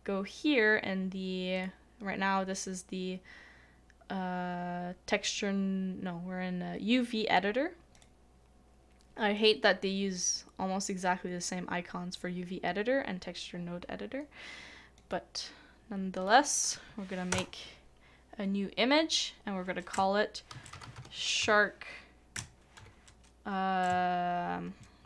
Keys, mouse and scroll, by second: 17.3 BackSpace, 19.9-23.1 typing.